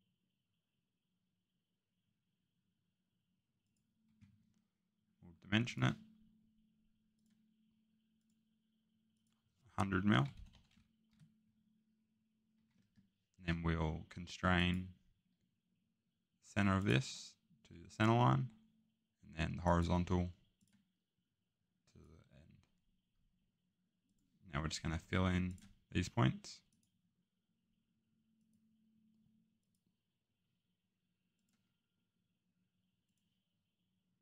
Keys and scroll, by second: 4.0 Escape, 10.1 typing, 11.1 Return, 12.5 Escape.